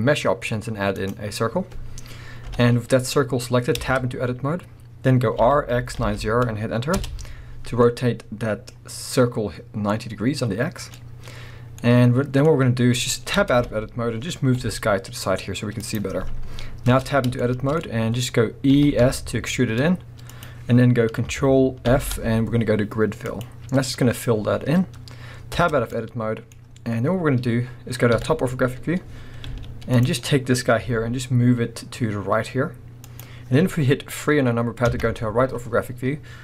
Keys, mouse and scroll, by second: 2.4 KP_1, 3.2-3.8 scroll up 1, 3.8 Tab, 5.4 r, 7.0 Return, 13.4 Tab, 13.6 KP_1, 14.6 g, 14.8 middle click, 15.9-16.9 drag, 16.9 Tab, 17.4 shift+middle click, 17.8-18.8 scroll up 1, 18.8 e, 19.9 middle click, 20.4 click, 21.9 ctrl+f, 24.4-25.0 scroll down 1, 25.0 scroll up 1, 25.6 Tab, 25.9-33.2 middle drag, 28.1 KP_7, 29.4 z, 30.9 g, 33.2 click, 34.8 KP_3, 35.7 scroll up 1.